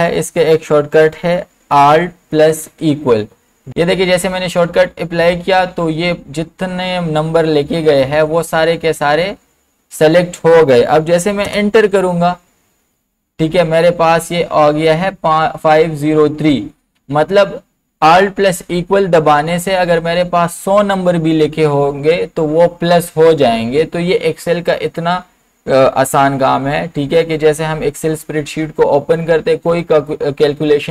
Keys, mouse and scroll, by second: 2.6 alt+=, 11.4 Return.